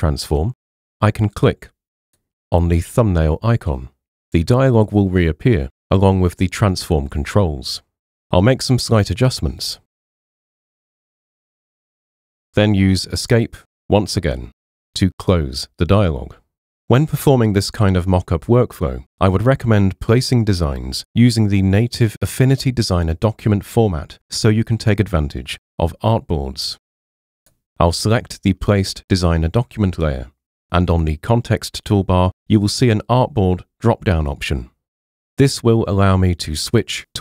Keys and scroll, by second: 13.4 Escape.